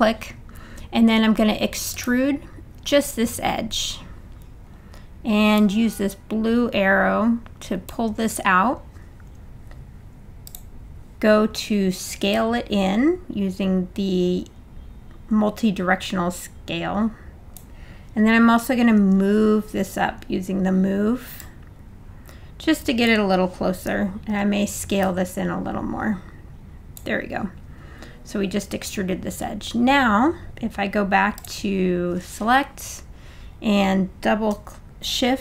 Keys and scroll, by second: 19.0 w, 24.3 r.